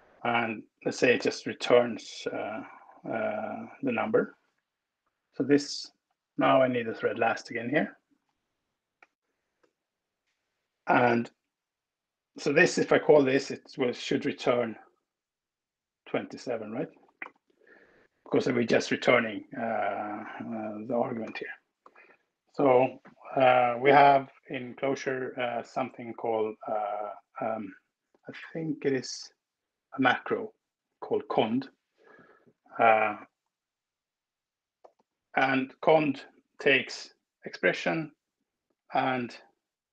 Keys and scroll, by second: 0.0 Right, 0.9 space, 1.1 n, 2.8 Escape, 7.9 shift+<, 9.0 Escape, 9.2 Tab, 10.7 Down, 11.1 Right, 16.6 alt+Return, 17.4 Escape, 20.9 BackSpace, 21.8 Return, 33.1 shift+8, 34.1-36.7 typing.